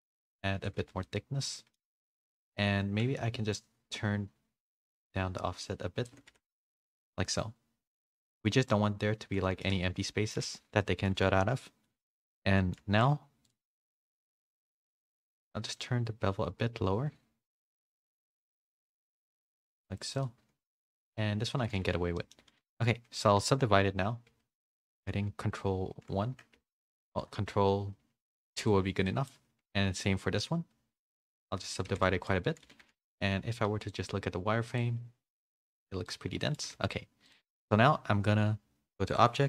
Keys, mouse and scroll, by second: 1.0 middle click, 1.0 a, 2.4 click, 2.4 a, 3.5-6.1 drag, 6.6 middle click, 6.6 a, 7.3 middle click, 7.3 a, 8.6 middle click, 10.0 middle click, 10.0 a, 10.8 middle click, 10.8 a, 11.6 middle click, 11.6 a, 12.5 middle click, 12.5 a, 13.4 click, 13.9 middle click, 15.7-19.3 shift+drag, 21.9 a, 22.1 middle click, 22.7-24.4 drag, 22.7 a, 24.4 ctrl+1, 25.2 ctrl+2, 27.2 ctrl+2, 27.2 ctrl+3, 28.2 ctrl+2, 29.0 middle click, 30.0 ctrl+2, 31.3 ctrl+3, 31.8 a, 32.2 middle click, 32.2 a, 32.9 a, 32.9 middle click, 33.8-36.3 drag, 36.5 middle click, 36.5 a, 39.0 a, 39.1-39.4 drag.